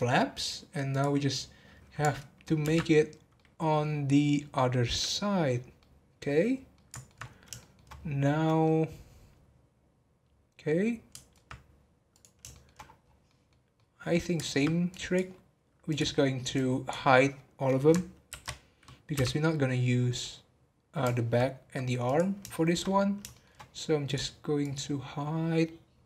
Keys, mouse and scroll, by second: 0.3-0.9 scroll down 3, 0.9 click, 3.3-6.5 middle drag, 6.5 scroll up 2, 6.7 middle click, 7.1 alt+scroll down 1, 7.2 scroll up 1, 7.6 shift+middle click, 7.9 scroll down 1, 8.6-11.6 middle drag, 11.6-12.1 scroll down 1, 12.1 click, 12.5 shift+middle click, 12.8 scroll down 2, 13.2-14.9 middle drag, 14.9 click, 15.9 click, 16.1 scroll up 2, 16.5 click, 19.5 middle click, 19.9 scroll up 1, 20.2-22.0 middle drag, 22.0 click, 22.5 shift+middle click, 22.8 scroll up 1, 23.3 shift+middle click, 24.0 click.